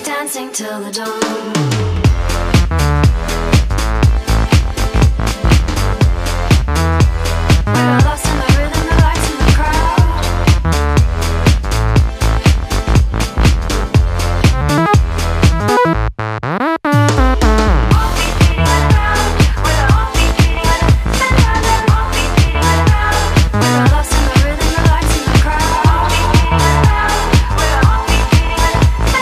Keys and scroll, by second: 0.9 space, 2.3 space, 3.1 space, 3.8 space, 4.3 space, 5.4 space, 5.9 space, 6.6 space, 8.9 space, 9.3 space, 11.4 space, 13.7 space, 14.6 space, 15.2 space, 16.5 space, 17.1 space, 17.7 space, 18.0 space, 19.1 space, 20.4-23.6 typing, 27.6 space, 28.4 space.